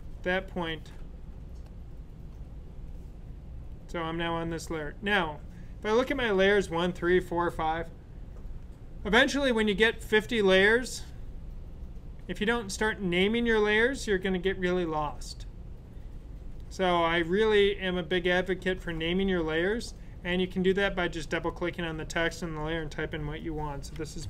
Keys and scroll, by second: 23.6-24.2 typing.